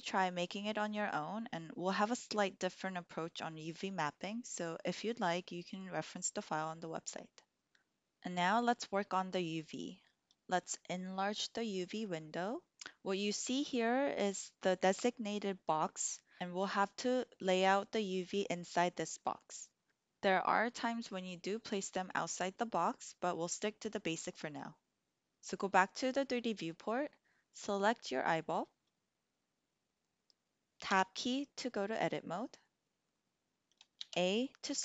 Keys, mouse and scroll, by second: 11.9 click, 30.8 Tab, 33.8 a.